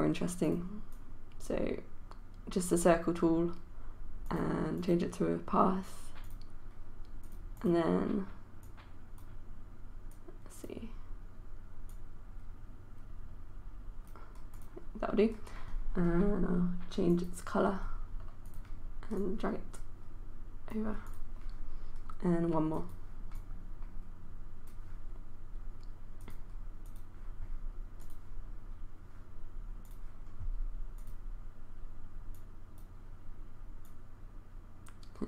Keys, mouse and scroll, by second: 0.5-35.2 drag.